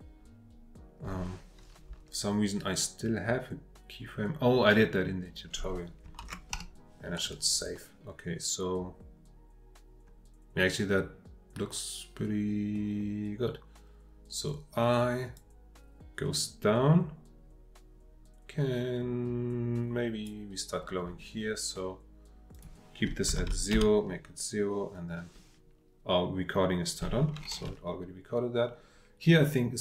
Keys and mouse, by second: 6.2 ctrl+s, 15.3-20.3 drag, 22.6-25.4 drag.